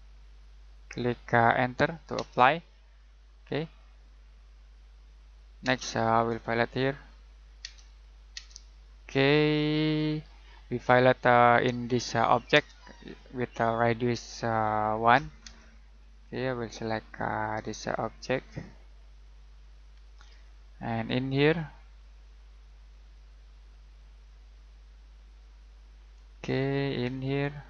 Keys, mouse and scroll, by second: 2.1 space, 2.8-3.3 scroll down 1, 3.3 middle click, 3.8-5.6 scroll up 1, 5.6 space, 6.0-7.0 scroll up 1, 7.0 click, 7.6 space, 9.0-9.7 scroll down 1, 9.7 middle click, 10.4-12.5 scroll up 1, 12.5 space, 12.8 middle click, 13.1-14.9 scroll up 1, 14.9 click, 15.4 space, 16.0 click, 19.9 scroll down 1, 20.1 middle click, 20.5-21.4 scroll up 1, 21.4 click, 26.2 middle click.